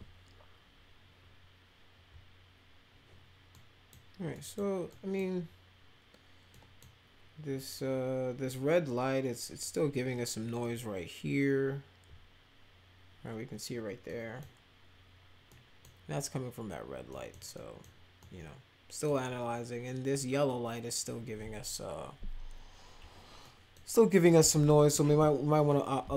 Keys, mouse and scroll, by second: 3.5-3.9 middle drag, 4.3 middle click, 4.8 middle click, 6.5 middle click, 14.0 middle click, 15.4 middle click, 17.0 middle click, 17.5 middle click, 18.2 middle click, 23.4-23.7 middle drag, 24.2 middle click, 25.7 middle click.